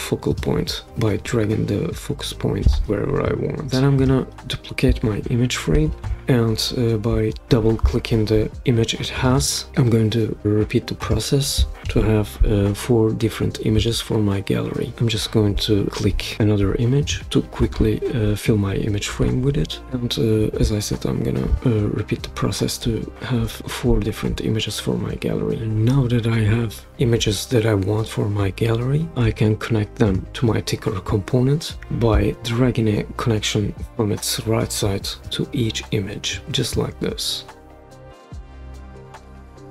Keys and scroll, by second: 5.6 super+d, 11.8 super+v.